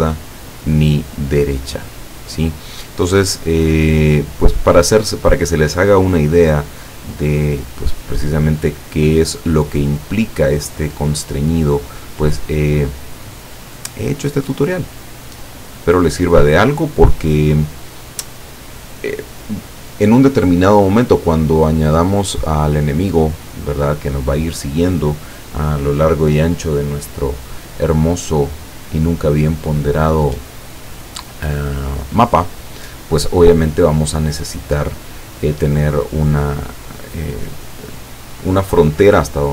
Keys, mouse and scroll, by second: 4.8-8.1 drag, 9.7-13.1 drag, 13.6 click, 14.6 click, 16.6-18.4 drag.